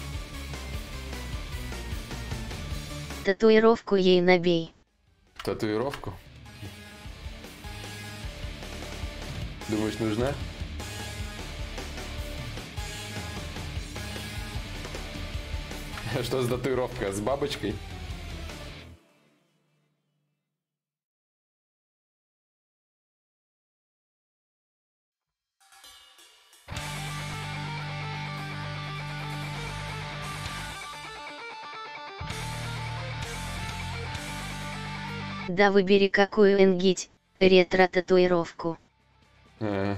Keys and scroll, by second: 5.0 a, 13.6 ctrl+z.